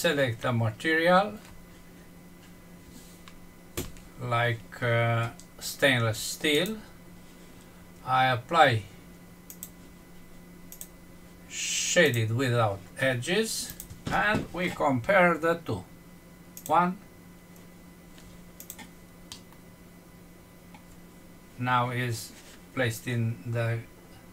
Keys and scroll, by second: 19.1 F6.